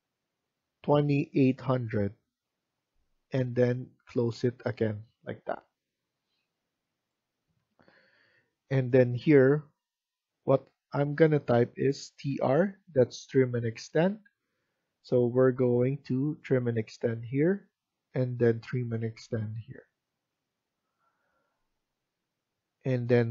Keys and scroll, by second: 7.5 Escape, 7.8 Escape, 8.0 Escape, 11.8-12.7 typing.